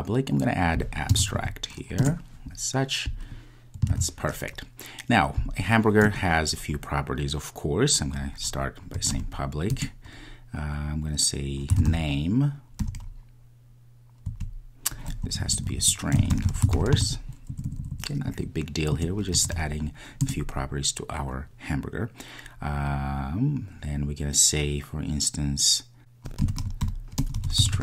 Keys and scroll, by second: 2.0 Return, 7.9 super+s, 9.7 Return, 9.8 Return, 20.3 Return.